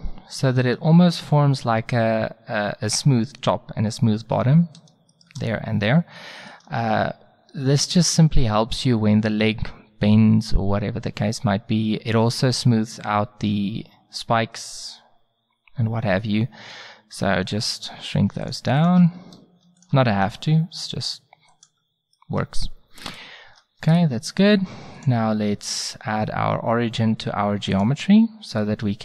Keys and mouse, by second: 5.1-8.3 middle drag, 16.7 s, 18.5-20.5 right drag, 20.2 s, 21.7 middle click, 23.5 Tab, 28.6 drag.